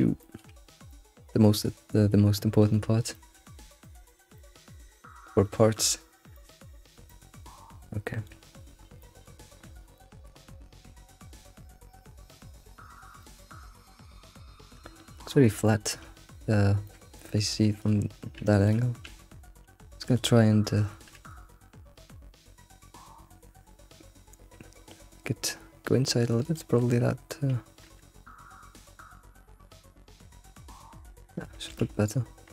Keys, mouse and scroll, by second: 0.2-2.6 shift+middle drag, 2.6-3.2 scroll down 5, 3.2 shift+middle click, 3.6 scroll down 1, 3.9 shift+middle drag, 4.1 scroll up 3, 4.4-4.9 shift+middle drag, 4.9-5.5 scroll down 4, 5.5-6.7 shift+middle drag, 6.7-7.1 scroll up 2, 7.1-8.5 shift+middle drag, 8.5-9.0 scroll up 7, 9.0-9.6 shift+middle drag, 9.6-10.0 scroll up 3, 11.6 middle click, 11.9-12.8 scroll up 5, 12.8-16.3 middle drag, 16.3-16.7 scroll down 3, 16.9-17.8 middle drag, 17.8 click, 18.7 click, 19.1 Tab, 19.5-20.1 scroll up 1, 20.1 alt+click, 21.2 alt+s, 28.0 ctrl+z, 28.4 alt+s, 30.5 g, 31.7 Tab, 32.3 Tab.